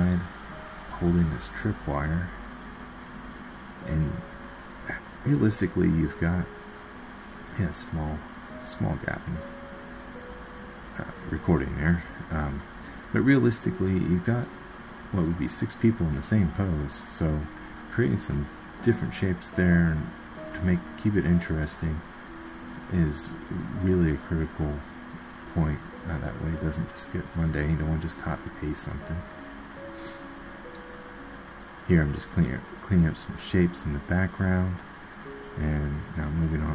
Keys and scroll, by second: 2.3 ctrl+z, 6.2 alt+Tab.